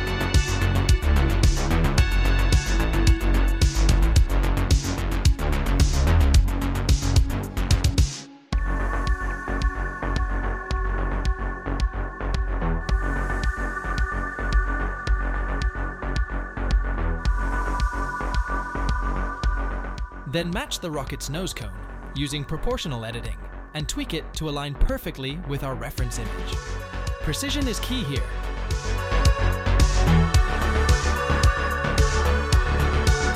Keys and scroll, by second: 2.4 Tab, 3.8 r, 6.8 1, 8.2 x, 9.7 Tab, 10.8 ., 12.8 Tab, 13.3 a, 13.5 s, 22.3 g, 22.4 z, 26.2 s, 26.8 shift+z, 28.9 2, 30.3 s, 30.8 shift+z.